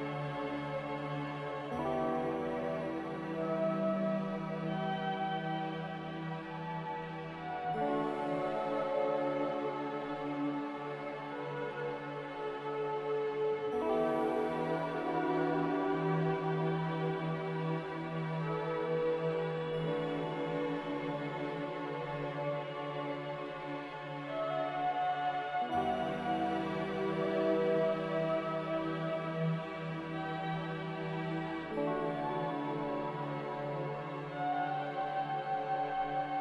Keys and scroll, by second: 10.9 ctrl+s, 24.6 3, 33.6-35.6 typing.